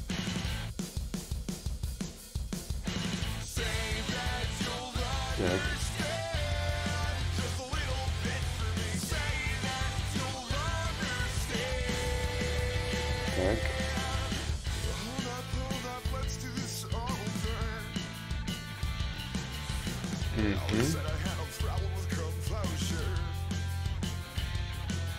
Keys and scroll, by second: 2.8 s, 4.4 s.